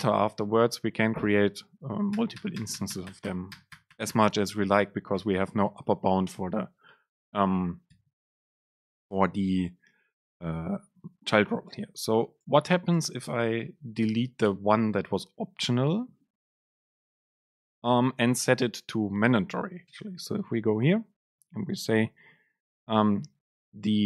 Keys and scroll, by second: 5.2 shift+Up, 8.8 Delete, 10.3 Up, 11.0 Down, 11.7 Up, 12.6 ctrl+shift+super+Left, 14.1 BackSpace, 20.0 super+space.